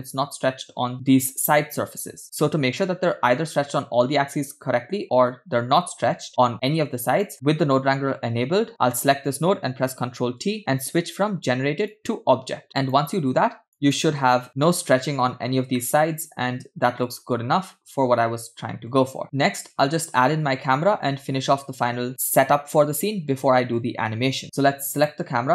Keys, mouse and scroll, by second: 6.3-6.9 scroll down 2, 6.9 scroll down 1, 7.2-7.7 middle drag, 7.7 click, 10.1 ctrl+t, 12.6-14.2 drag, 16.0-19.1 middle drag, 19.2 click, 19.2 scroll down 2, 19.4-19.9 scroll up 2, 21.5 scroll down 1, 22.3 scroll up 1, 24.9 click.